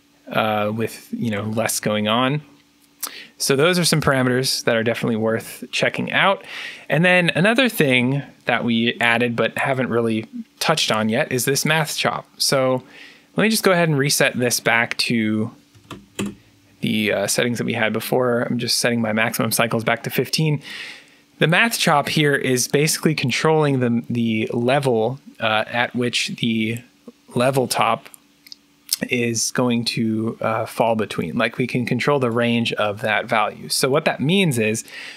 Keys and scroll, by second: 1.2 3, 15.4-16.2 typing, 18.0-18.7 typing.